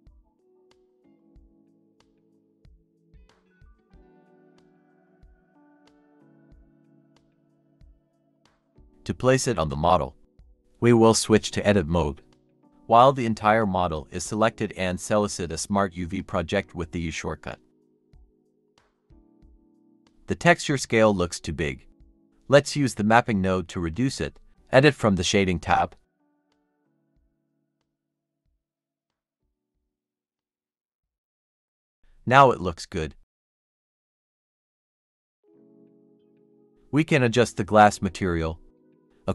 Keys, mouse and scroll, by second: 0.9 double click, 1.4-1.9 scroll up 1, 5.8-6.1 typing, 7.2 scroll down 1, 7.9-8.3 typing, 9.8 double click, 11.3 Tab, 11.6-13.1 typing, 11.9 Tab, 12.5 Tab, 13.5-14.1 scroll down 1, 14.7 typing, 17.0-17.7 typing, 19.9 Tab, 20.5 typing, 21.1-21.7 scroll up 1, 21.7 typing, 23.3 scroll down 1, 24.0 typing, 24.7 Tab, 25.4-26.1 scroll up 1, 28.0 typing, 28.2 Return, 29.5 typing, 29.6 Return, 30.6 typing, 30.8 Return, 31.1-33.8 scroll down 1.